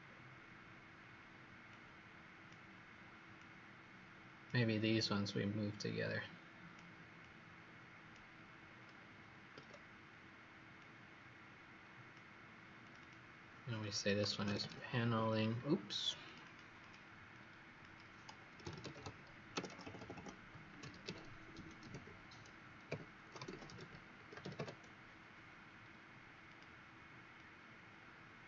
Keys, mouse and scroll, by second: 1.6 click, 8.6-9.5 scroll up 4, 9.5 Escape, 10.7 click, 12.9 click, 14.1-15.4 typing, 16.2 click, 16.3 click, 16.7 click, 17.3 click, 18.3-25.0 typing, 26.4 click.